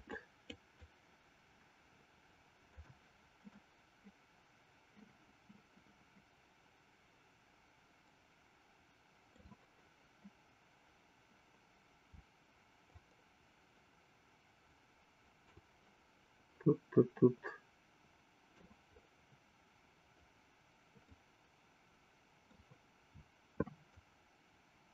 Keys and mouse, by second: 0.2 shift+click, 1.1-3.2 shift+drag, 4.1-9.8 middle drag, 13.1-16.1 shift+drag, 17.0-19.0 middle drag, 21.6-22.8 middle drag, 24.2-24.9 shift+drag.